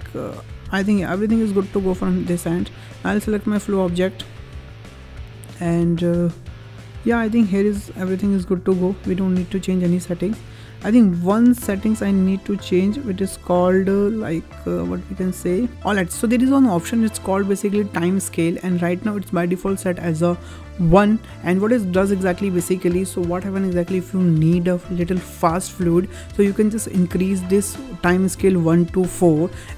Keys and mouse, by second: 2.9 click, 27.3-29.7 drag.